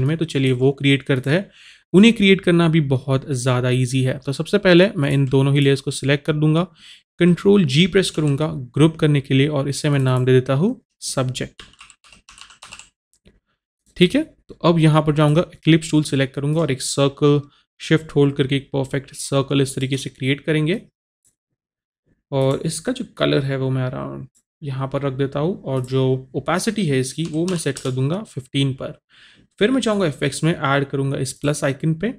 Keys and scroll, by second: 8.1 ctrl+g, 11.6-12.7 typing, 27.6 KP_1, 27.6 KP_5, 27.8 Return.